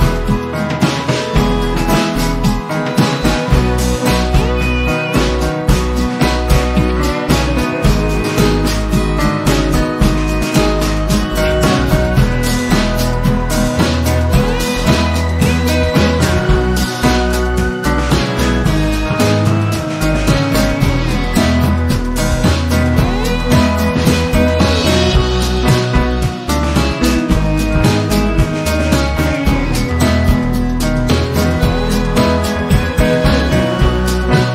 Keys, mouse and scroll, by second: 4.9 Delete, 6.1-9.0 drag, 23.2 Delete, 27.1 p, 28.0 click, 30.7 v, 31.4 ctrl+shift+v, 32.2-34.1 drag.